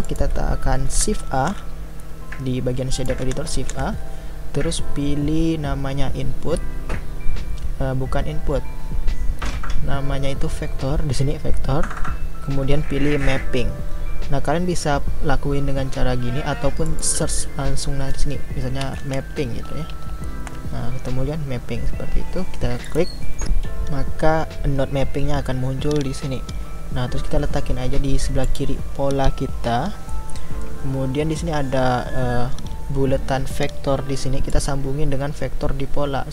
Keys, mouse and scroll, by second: 0.0-22.9 drag.